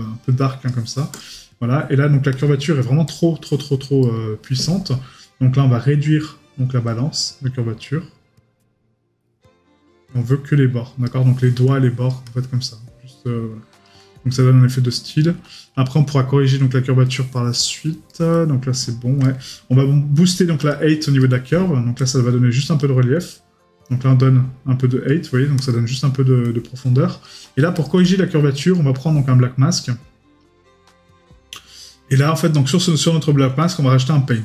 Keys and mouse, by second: 4.0 right click, 17.1 middle click, 17.5 right click, 21.2 right click, 28.7 right click.